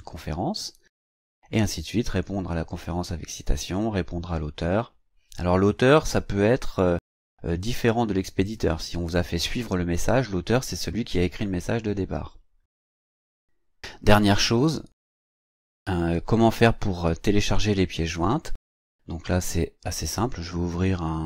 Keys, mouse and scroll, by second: 19.1 click.